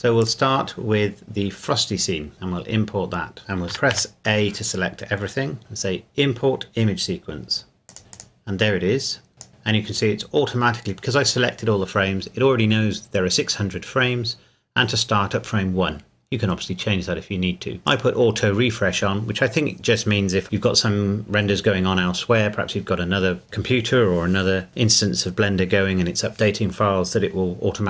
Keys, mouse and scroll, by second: 3.7 a, 3.9 a, 7.9 click, 8.8-9.3 scroll up 1, 9.3 click, 17.9 click.